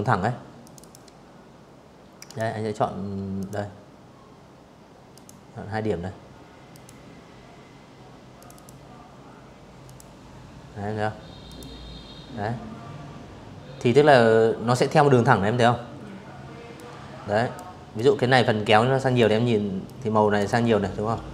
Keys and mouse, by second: 1.1 drag, 2.8 click, 4.4 click, 6.0 click, 6.2 click, 7.5 click, 9.1 click, 14.4 click, 15.6-16.8 drag, 17.5 click, 18.1-19.7 drag, 20.8-21.3 drag.